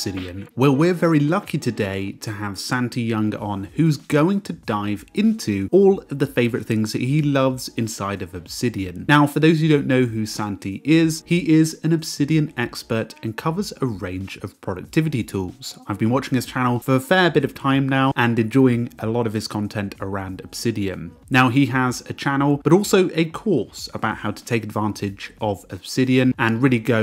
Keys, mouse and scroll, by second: 0.0-1.4 typing, 1.1 click, 1.5 Escape, 6.9 ctrl+alt+2.